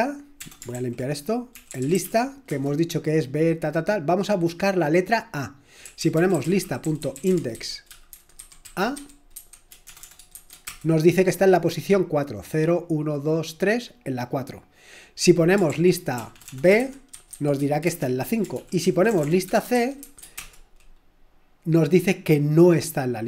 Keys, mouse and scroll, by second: 0.0 typing, 0.7 ctrl+l, 1.3-2.5 typing, 5.6-10.3 typing, 10.7 Return, 15.7 ctrl+p, 16.2-20.0 typing, 17.9 Return, 18.5 ctrl+p, 20.4 Return.